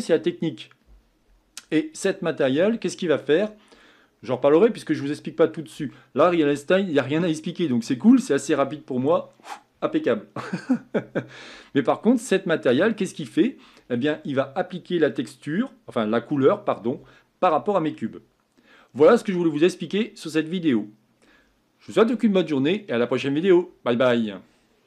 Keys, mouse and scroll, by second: 12.8-13.3 scroll down 2.